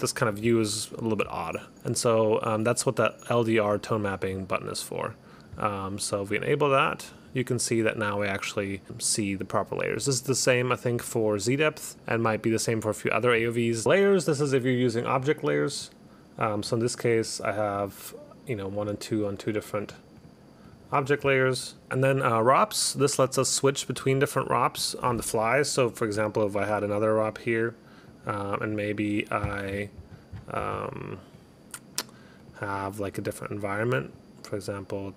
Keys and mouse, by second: 1.7 click, 3.8 click, 12.4 click, 13.8 click, 14.6 click, 15.2 click, 15.8 click, 16.7 click, 17.3 click, 17.9 click, 19.0 click, 19.4 click, 20.0 click, 20.3 click, 20.7 click, 21.9 click, 24.5 click, 26.3 click, 28.2 click, 28.8 click, 29.1 click, 31.5 click, 32.5 click, 34.1 click.